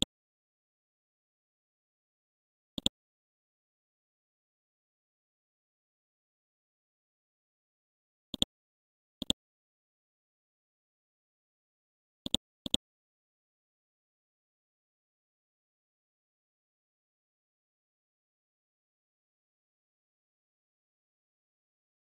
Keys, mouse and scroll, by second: 1.2 scroll down 1, 2.1 scroll up 1, 2.8 click, 4.7-5.0 scroll down 1, 5.4 scroll up 1, 6.6 scroll down 1, 8.3-11.2 drag.